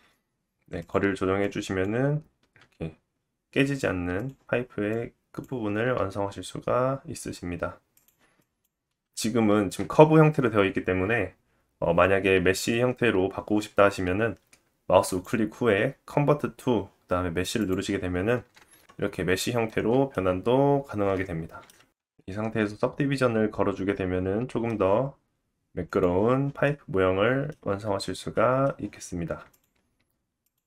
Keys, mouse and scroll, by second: 1.2-7.3 drag, 2.9 g, 6.1 g, 7.3 middle click, 8.0 click, 8.7-15.1 middle drag, 15.1-19.4 drag, 15.1 right click, 18.4 Tab, 19.4-29.5 right drag, 19.4 middle click, 20.8-21.4 scroll up 1, 21.4 scroll down 1, 22.2-29.5 drag, 22.2-29.5 middle drag.